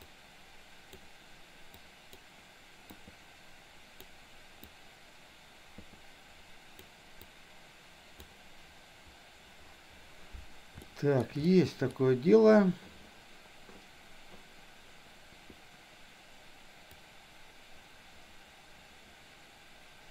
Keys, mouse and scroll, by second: 0.0-1.0 drag, 1.8 click, 2.9-4.0 drag, 4.7-6.8 drag, 7.3 click, 10.9 shift+middle click, 11.4 middle click, 17.0-20.1 drag.